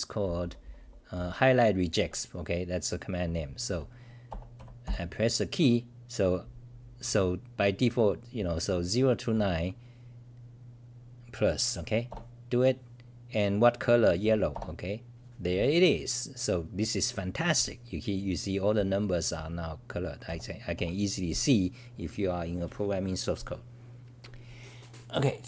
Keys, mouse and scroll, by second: 9.3 Up, 12.1 Return, 16.1 Return, 16.1-16.7 scroll down 5, 18.0-19.0 scroll down 1, 19.0 t, 19.1 t, 19.3-20.2 t, 20.2 Page_Down, 21.5 Page_Down, 21.5-22.3 scroll up 5.